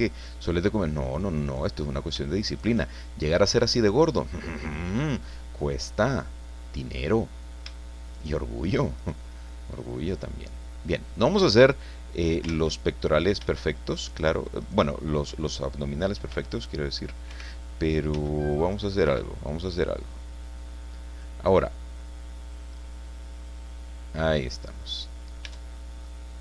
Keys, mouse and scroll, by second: 0.2 click, 1.5 right click, 2.5 shift+right click, 2.8-4.0 shift+middle drag, 4.0 click, 5.9-7.0 drag, 8.1 shift+right click, 9.0 shift+right click, 10.1-12.5 drag, 12.5 ctrl+z, 14.0 shift+right click, 14.6 shift+right click, 16.3 b, 17.3 Escape, 18.1 c, 18.5 click, 19.0 Escape, 20.0-21.4 drag, 22.0 middle click, 22.4-25.5 drag, 25.5 Tab, 25.7 scroll down 1, 26.0-26.4 drag.